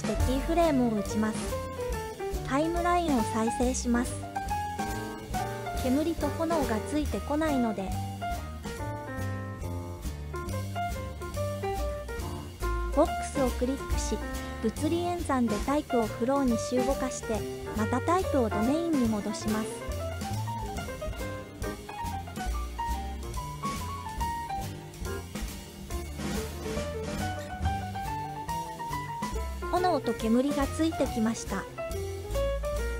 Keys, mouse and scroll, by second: 0.6 click, 3.1 space, 5.3 space, 8.4-11.1 drag, 12.6 click, 15.5-16.8 scroll up 4, 19.9-21.3 drag, 22.0 click, 24.7 space, 25.3 space, 26.2-27.0 drag, 28.3-29.4 drag, 32.3 space.